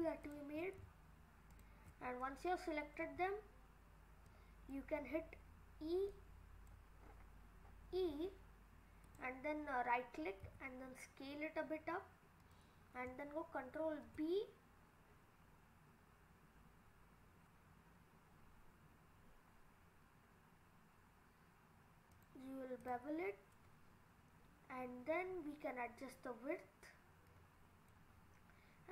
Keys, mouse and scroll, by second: 0.2 alt+shift+click, 1.5 alt+shift+click, 2.0-2.4 scroll down 2, 2.2 middle click, 4.3 click, 5.1-6.1 scroll up 6, 6.1 click, 7.0-7.6 scroll up 4, 7.6-8.1 scroll down 4, 8.1 e, 10.4 s, 13.8 ctrl+b, 22.8 click, 24.4-25.1 scroll up 3, 25.1-25.8 scroll up 5, 27.3 click.